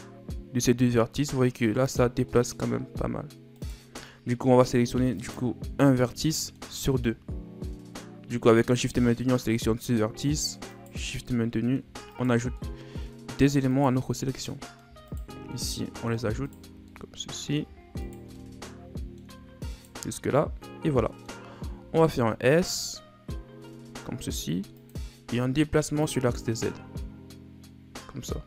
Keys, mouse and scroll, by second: 5.1 right click, 6.1-8.7 middle drag, 8.7 right click, 10.7 shift+right click, 11.1 middle click, 12.0 shift+right click, 12.5-13.7 middle drag, 13.7 shift+right click, 14.1 middle click, 15.0 shift+right click, 15.5 middle click, 16.4 shift+right click, 16.8-17.9 middle drag, 17.9 shift+right click, 18.3-19.7 middle drag, 19.7 shift+right click, 20.1-21.7 middle drag, 21.7 s, 25.9-28.4 drag.